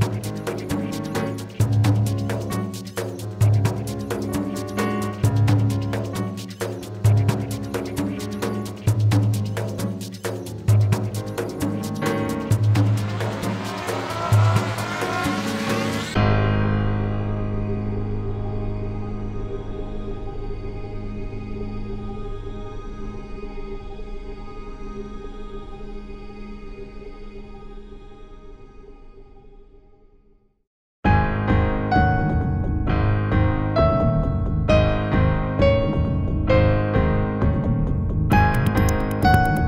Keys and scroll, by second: 2.9 space.